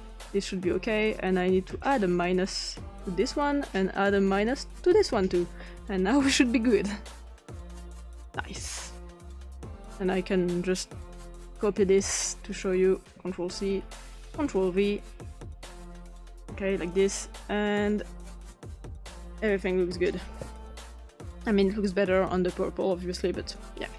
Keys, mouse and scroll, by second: 1.0 click, 2.0 click, 3.7 click, 4.3 click, 6.3 click, 7.4 click, 9.8 click, 11.6-12.6 shift+drag, 13.2 ctrl+c, 14.2 ctrl+v, 15.9 click, 17.1 click, 17.9 click, 22.4 click.